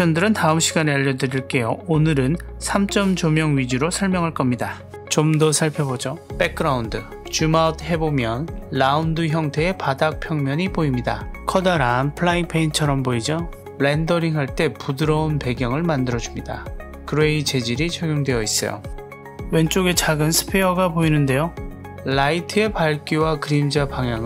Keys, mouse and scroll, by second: 4.7 click, 5.9 click, 7.5-7.8 scroll down 6, 7.8-8.8 middle drag, 9.0-9.4 scroll down 1, 9.4-10.6 middle drag, 11.3 Tab, 11.9 middle click, 12.5 Tab, 12.9-14.3 scroll up 9, 14.3-14.9 middle drag, 16.8 click, 18.1 click, 19.2 click, 20.0-20.6 scroll up 3, 20.6-21.7 middle drag.